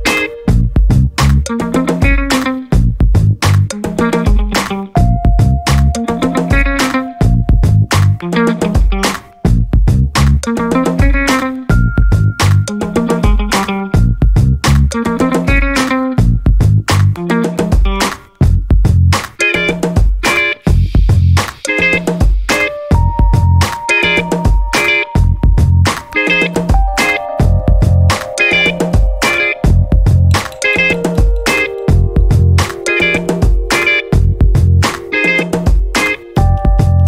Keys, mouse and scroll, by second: 0.0-1.5 typing, 3.1 click, 3.9 click, 4.7-5.3 scroll down 2, 5.5 scroll up 1, 6.1 scroll down 2, 6.7 scroll up 2, 8.4 click, 8.9 space, 9.8 click, 10.7-11.0 scroll down 2, 11.5 scroll up 2, 15.1 click, 17.6-18.8 drag, 19.5 click, 23.7-28.3 drag, 30.4 click, 31.7-34.7 drag, 35.1-37.0 drag.